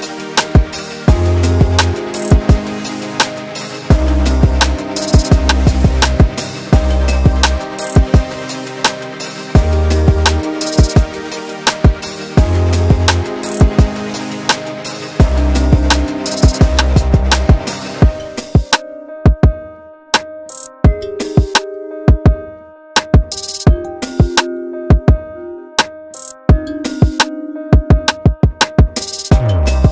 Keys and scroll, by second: 0.6 s, 1.2 ctrl+z, 2.5-3.4 typing, 4.7 space, 7.0 m, 12.9 s, 15.4 space, 17.6 h, 20.9 space, 24.2 s, 27.0 space, 27.9 m.